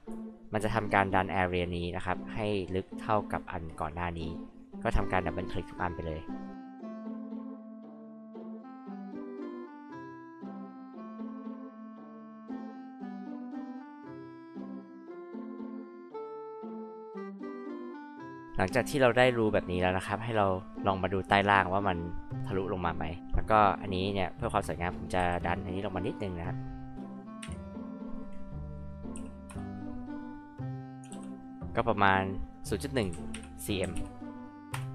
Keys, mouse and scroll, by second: 10.2 click, 10.4 click, 10.5 click, 10.7 click, 10.7 click, 10.8 click, 10.9 click, 11.1 click, 11.3 click, 11.5 click, 11.6 click, 11.8 click, 11.9 click, 12.0 click, 12.1 click, 12.3 click, 12.3 click, 12.5 click, 12.5 click, 12.7 click, 12.7 click, 12.9 click, 13.0 click, 13.1 click, 13.2 click, 13.3 click, 13.6 click, 13.8 ctrl+z, 13.9 click, 14.1 click, 14.2 click, 14.4 ctrl+z, 14.4 click, 15.0 ctrl+z, 15.1 click, 16.0 click, 16.1 click, 16.3 click, 16.4 click, 16.7 click, 16.8 click, 16.9 click, 17.0 click, 18.3 click, 18.3 click, 25.2 p, 25.7-26.9 drag, 26.9 KP_0, 27.4 KP_1, 29.1 m, 29.5 Return, 31.1 ctrl+z, 31.8 click, 33.0-34.4 typing, 34.7 Return.